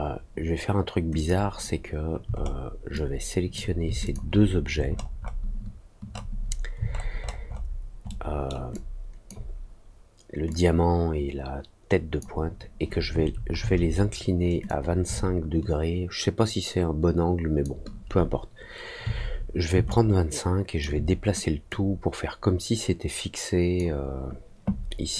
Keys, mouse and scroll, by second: 1.1 click, 2.3 alt+middle click, 2.9 alt+click, 4.0 shift+click, 4.8 shift+middle click, 5.1 shift+middle click, 6.1 shift+scroll down 1, 6.8-7.6 alt+scroll down 3, 7.9 alt+scroll down 1, 8.1 alt+middle click, 8.7 alt+click, 10.4-12.1 drag, 14.6-17.6 drag, 19.8 alt+click, 21.6-23.7 drag.